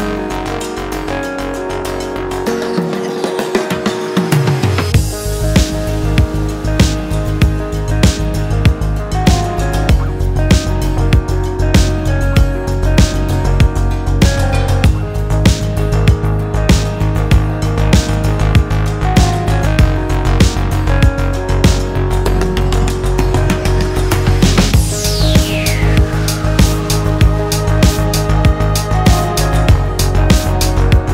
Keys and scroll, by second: 17.4 super+z.